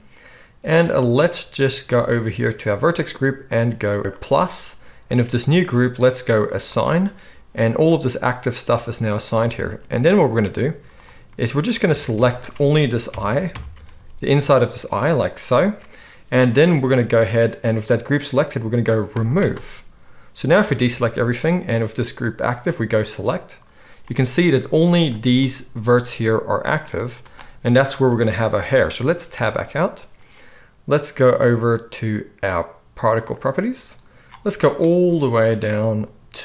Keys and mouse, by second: 4.0-12.4 drag, 10.7 z, 11.8 alt+a, 12.4-19.1 ctrl+shift+middle drag, 13.1 ctrl+KP_Add, 13.5 ctrl+KP_Add, 13.9 z, 19.1-33.6 drag, 20.6 alt+a, 24.6 z, 26.9 z, 29.3 Tab, 33.6-36.4 middle drag.